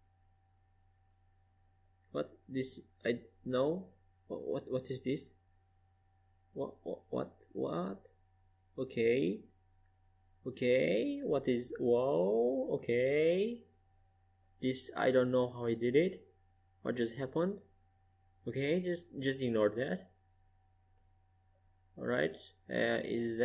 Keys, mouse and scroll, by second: 0.9 KP_Decimal, 7.6 KP_Decimal, 11.0-12.9 drag, 15.5-18.6 drag, 18.7-23.4 drag.